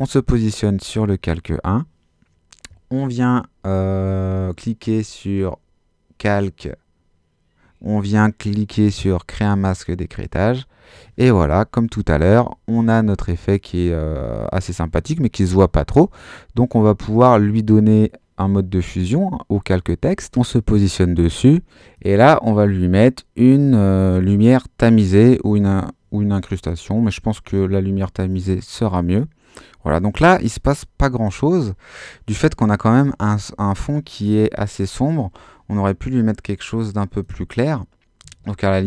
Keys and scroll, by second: 38.2 Escape.